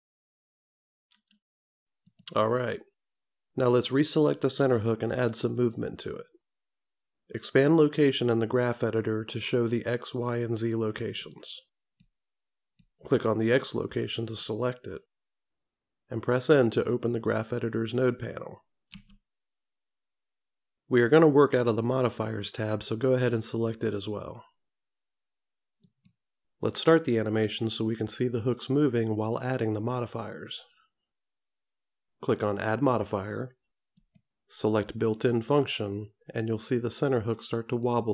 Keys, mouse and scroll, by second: 1.2 i, 5.7 click, 10.4 click, 14.5 click, 19.0 n, 26.0 click, 34.1 click, 37.8 click.